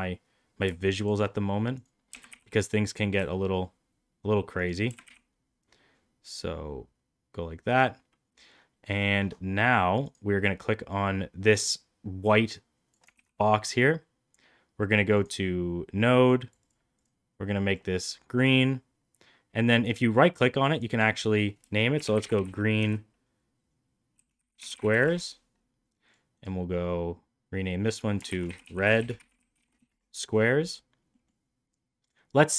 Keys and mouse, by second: 1.0 shift+right click, 2.0 g, 4.8 g, 11.6-12.9 drag, 13.1 ctrl+z, 15.1 click, 16.3 click, 16.6 click, 16.9 click, 19.7-25.5 right drag, 22.3 e, 26.0 click, 26.5-30.5 right drag, 31.1 middle click, 32.0-32.5 drag.